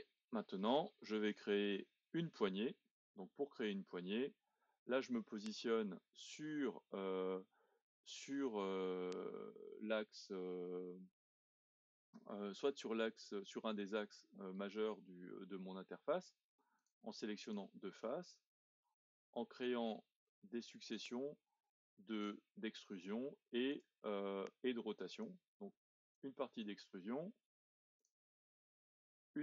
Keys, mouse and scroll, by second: 6.2-8.8 scroll up 1, 8.8-9.9 middle drag, 9.9-10.5 scroll down 2, 10.5-13.1 middle drag, 13.1-14.3 scroll up 1, 14.3-16.8 scroll down 1, 16.8 click, 17.4 shift+click, 18.0-21.1 middle drag, 21.1-21.7 scroll up 1, 21.7-23.7 middle drag, 23.7-25.4 drag, 28.0-29.4 drag.